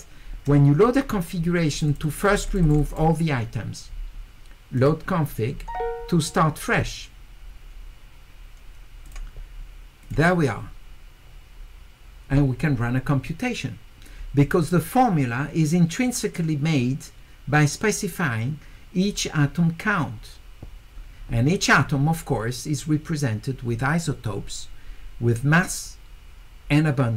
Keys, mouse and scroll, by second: 1.4-2.8 scroll up 2, 1.7 click, 1.9 click, 2.0 click, 2.3 click, 2.5 click, 2.6 click, 2.8 click, 4.8 click, 6.7 middle click, 6.7-7.2 scroll up 2, 9.0 click, 10.0 click.